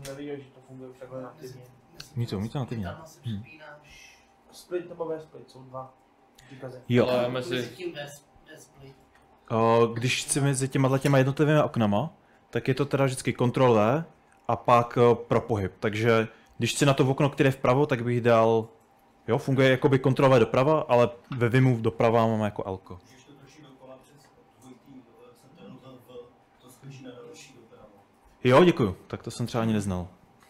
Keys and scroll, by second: 0.0-0.1 typing, 9.3-11.3 typing, 13.3 ctrl+w, 14.8 h, 18.0 ctrl+w, 19.0 Right, 23.2 ctrl+w, 23.5 h, 27.2 ctrl+w, 27.3 ctrl+w, 27.8 ctrl+w, 28.0 ctrl+w, 28.4 ctrl+w, 28.8 ctrl+w, 29.1 ctrl+w, 29.5-30.3 ctrl+w.